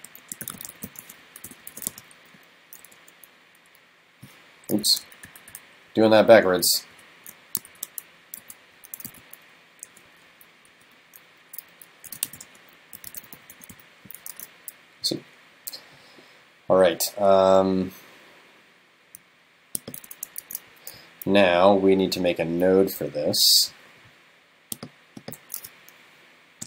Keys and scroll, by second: 8.4 super+x, 9.1 super+v, 14.3 super+s, 20.5 super+s.